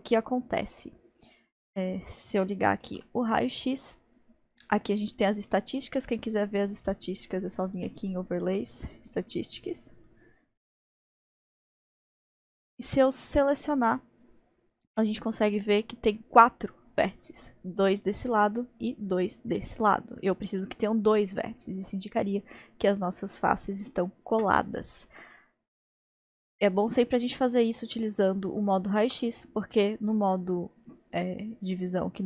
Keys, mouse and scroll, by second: 2.8 alt+z, 7.7 click, 13.3 click, 25.3-28.4 middle drag, 29.0 alt+z, 32.1 click.